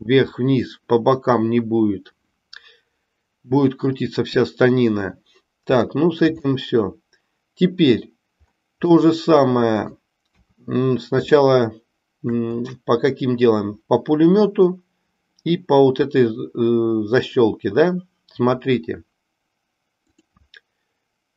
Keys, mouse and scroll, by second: 5.8 shift+middle click, 6.6-8.0 middle drag, 9.0-10.0 middle drag, 11.3-12.4 middle drag.